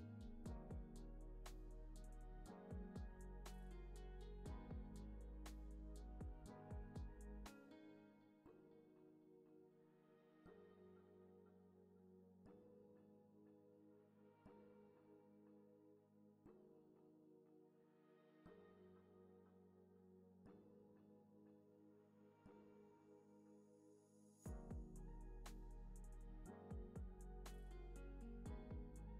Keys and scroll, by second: 2.6 Left, 8.0 alt+z, 9.1 alt+x, 10.2 alt+z, 13.5 alt+x, 15.1 alt+z, 16.0 alt+x, 21.8 space.